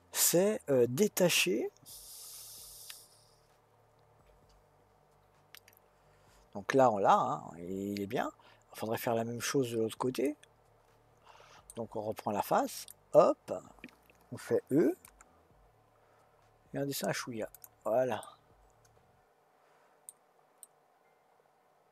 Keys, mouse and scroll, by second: 12.8 click, 15.0 e, 18.2-21.9 middle drag.